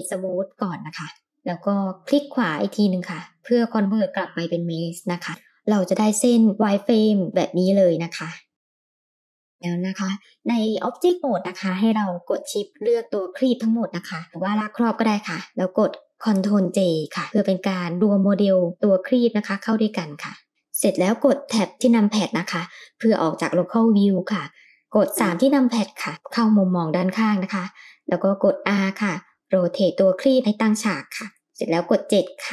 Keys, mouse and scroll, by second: 5.0 click, 5.8 Tab, 7.7-9.5 middle drag, 10.5 shift+click, 13.4-13.7 scroll down 1, 14.3 click, 16.4 ctrl+j, 17.6-18.8 middle drag, 22.5-23.0 shift+middle drag, 23.3-23.8 middle drag, 24.1 scroll down 2, 25.2 KP_3, 26.6-27.1 shift+middle drag, 28.4 r, 32.1 KP_7.